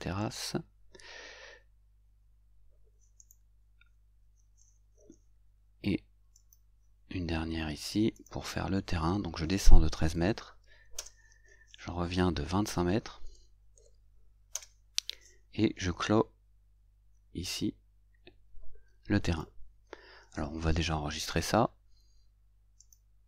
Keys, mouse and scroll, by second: 0.3 click, 0.3 right click, 3.2 right click, 6.4 click, 8.2 click, 10.1 shift+1, 10.4 shift+3, 11.0 Return, 13.3 shift+2, 13.8 shift+5, 19.3 click, 22.8 click.